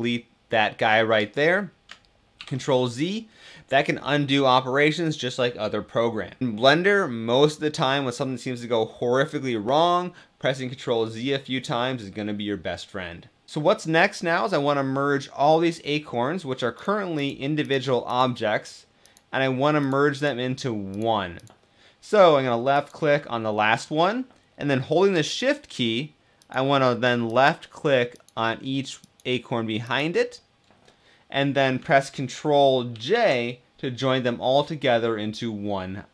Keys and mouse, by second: 2.1 ctrl+z, 16.8 click, 17.7 click, 18.7 click, 19.9 click, 20.7 click, 27.0 shift+click, 32.6 ctrl+j.